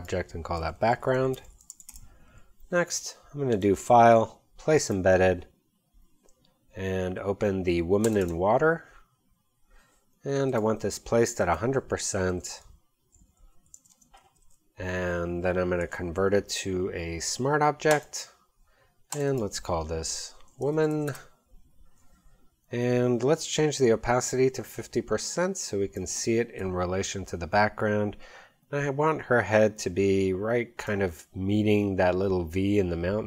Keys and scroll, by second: 0.4-2.3 typing, 12.4 super+a, 13.4-14.2 typing, 20.3-21.4 typing.